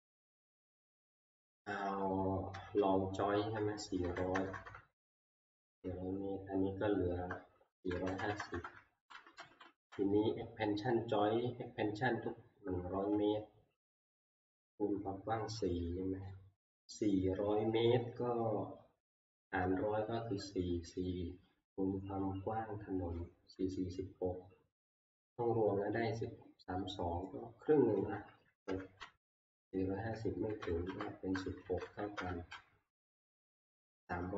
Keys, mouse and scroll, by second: 2.5 Down, 2.7 Down, 4.0-5.5 typing, 4.8 Return, 5.6 Down, 5.8-6.5 Down, 7.7-8.9 typing, 9.6 Up, 12.5 typing, 13.6 Up, 28.0 Up, 28.0 Down, 28.0-28.3 typing, 28.7 Return, 29.3-30.0 Down, 30.4 Down, 31.6 typing, 32.2 Return.